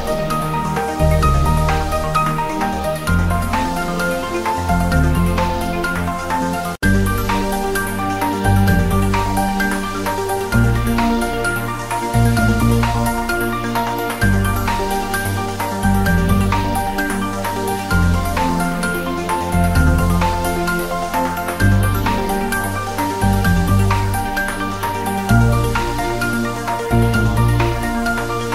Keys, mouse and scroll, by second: 6.4 click, 6.7-7.0 scroll down 1, 7.0 click, 7.2 scroll down 1, 7.5 r, 7.8 click, 8.3 s, 8.5 click, 9.0 ctrl+3, 9.2-9.5 scroll up 1, 9.5 Tab, 9.9 ctrl+r, 10.1 click, 11.1 click, 11.3 ctrl+r, 11.6 click, 11.8 ctrl+r, 12.1 click, 13.1 ctrl+r, 13.2 click, 14.2 ctrl+r, 14.3 click, 14.9 Tab, 15.7 click, 16.8-21.8 typing, 17.4 click, 17.8 click, 18.8 click, 19.2 scroll up 1, 19.7 click, 20.6 click, 21.6 click, 22.8 click, 23.0 s, 23.7 click, 24.6-26.7 typing, 25.2 click, 25.5 scroll down 1, 26.9 click, 27.0 scroll up 1, 27.6 scroll down 1.